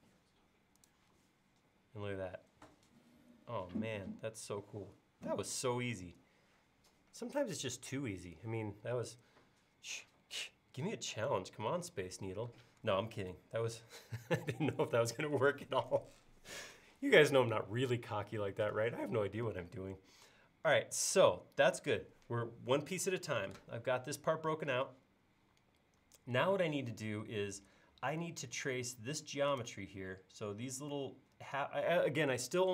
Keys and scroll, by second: 13.6 super+s.